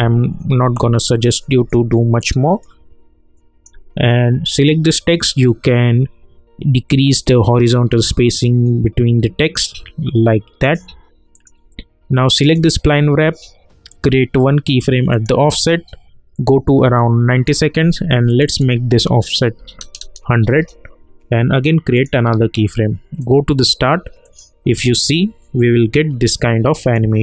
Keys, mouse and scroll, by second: 0.6 ctrl+z, 1.9 alt+middle click, 2.6-4.5 alt+drag, 7.2-11.3 drag, 15.1-18.3 drag, 20.5 Return, 21.9 click, 26.8 click.